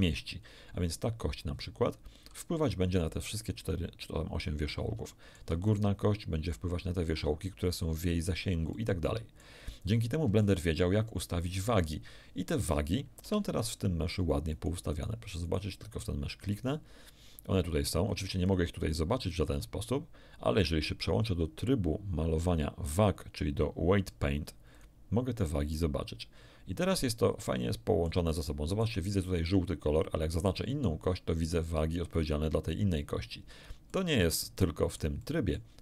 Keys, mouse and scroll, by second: 5.0 shift+middle click, 5.6 shift+right click, 8.7 shift+middle click, 10.0 shift+scroll down 1, 10.4 shift+middle click, 13.2 Tab, 13.5 right click, 14.5 right click, 15.4 right click, 17.9 click, 18.4 click, 19.1 click, 22.3 click, 24.7 click, 25.7-28.2 middle drag, 28.5 shift+middle click, 30.7 right click, 33.9-35.7 middle drag.